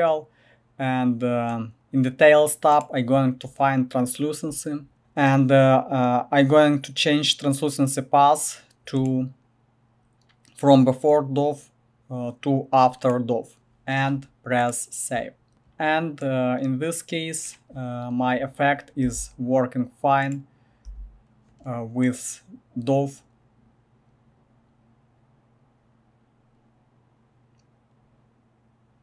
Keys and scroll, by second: 4.9 typing, 19.0 g, 20.8 typing.